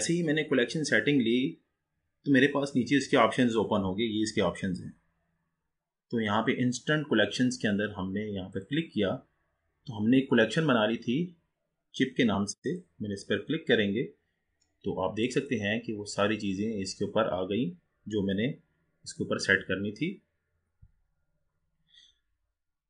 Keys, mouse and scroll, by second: 2.3-3.6 scroll down 2, 6.2 scroll down 2, 8.5-11.7 drag, 15.3 click, 16.4-18.0 scroll up 7, 18.0-18.6 scroll down 4, 18.6-20.3 scroll down 1.